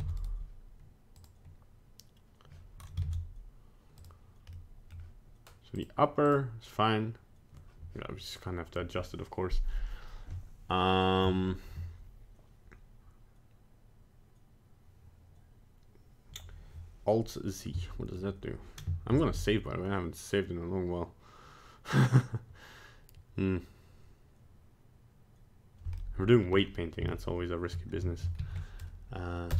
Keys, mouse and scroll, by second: 0.0 ctrl+Tab, 0.2 right click, 1.2 click, 3.0 ctrl+Tab, 4.5 middle click, 5.8 click, 6.3 click, 26.0 middle click, 26.3 middle click, 26.6-27.0 scroll up 1, 27.1 shift+middle click, 27.2 shift+middle click, 28.6 shift+middle click, 29.5 ctrl+shift+s.